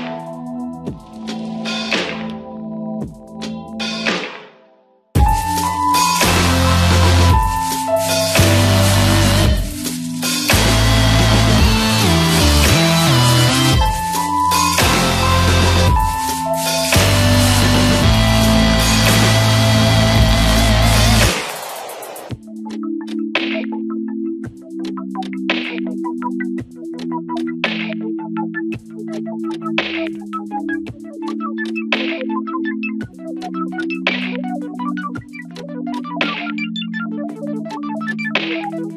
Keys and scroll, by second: 1.9 r, 2.9 ctrl+space, 5.0 r, 5.9 ], 13.9 space, 15.3 space, 31.2 [, 38.4 space.